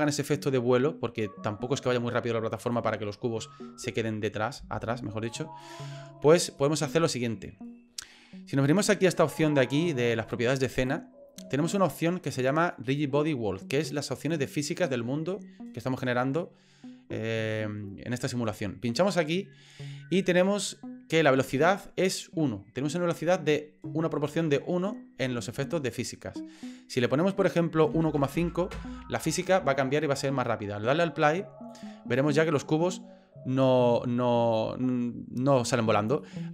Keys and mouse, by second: 0.3 click, 2.6 click, 6.6 middle click, 18.8 click, 26.9-30.3 drag, 34.6-35.6 middle drag, 36.2 middle click.